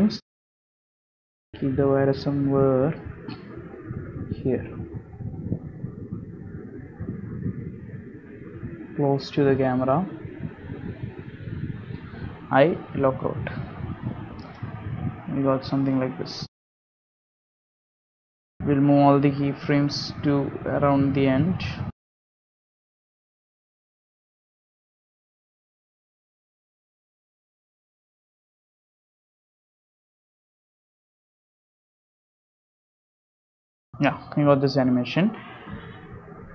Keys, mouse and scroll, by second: 0.0 middle click, 0.4 scroll up 2, 0.7 shift+middle click, 1.1 scroll up 1, 3.3 middle click, 3.9 g, 5.2 middle click, 6.0 shift+middle click, 6.5 g, 7.6 middle click, 8.2 scroll up 2, 8.5 g, 11.0 middle click, 11.4-11.9 scroll up 3, 11.9 shift+middle click, 12.5 g, 15.0 i, 16.6 click, 16.9 space, 18.9 click, 20.2 space, 21.4 a, 21.9 g, 23.7 space, 26.2 space, 26.8 click, 27.9 Down, 28.3 middle click, 28.9 g, 31.7 i, 32.7 click, 32.8 space, 34.4 click, 35.9 space.